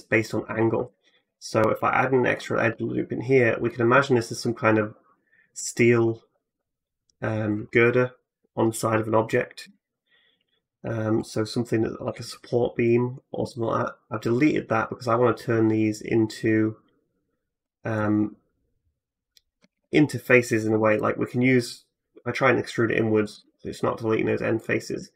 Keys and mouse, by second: 0.5 click, 1.0 ctrl+r, 1.9 click, 2.5 3, 2.8 middle click, 3.9 ctrl+click, 4.6-11.1 drag, 9.4 x, 11.6-19.4 drag, 19.5 ctrl+z, 20.5 3, 20.8-21.9 drag, 20.8-21.9 middle drag, 20.8-21.9 right drag, 21.9 e, 22.7-25.1 drag, 23.2 ctrl+z, 24.4 right click.